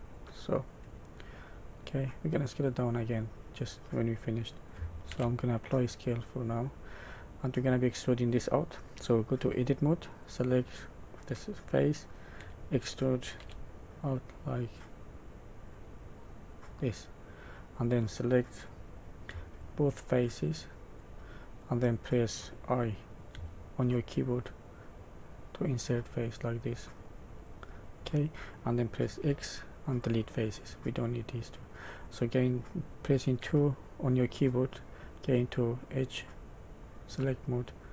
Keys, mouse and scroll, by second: 0.6 middle click, 2.3-3.1 scroll up 3, 3.1 middle click, 5.1 ctrl+a, 6.2 middle click, 7.3 middle click, 9.3 Tab, 10.2 click, 12.3 e, 17.2 middle click, 19.5 shift+click, 20.1 middle click, 21.2 middle click, 21.7-22.1 scroll up 2, 23.3 i, 27.9 middle click, 29.1 x, 30.7 middle click, 31.1 middle click, 31.3 middle click, 33.3 2, 34.3 middle click, 36.2 click, 37.5 middle click.